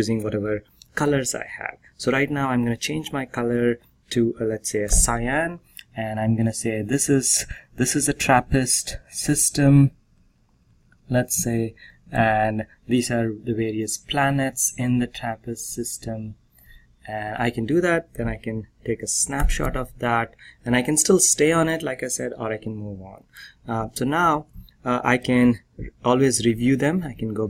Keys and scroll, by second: 4.8 c, 19.3 ctrl+p, 24.1 ctrl+c, 26.4 ctrl+r.